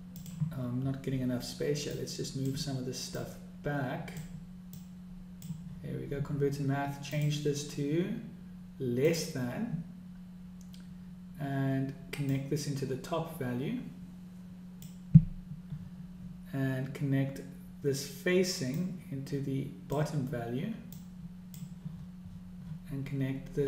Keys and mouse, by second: 2.6 click, 3.7-4.9 drag, 5.3 click, 7.7-9.9 drag, 13.0-15.5 drag, 19.4-20.6 drag, 21.6 click.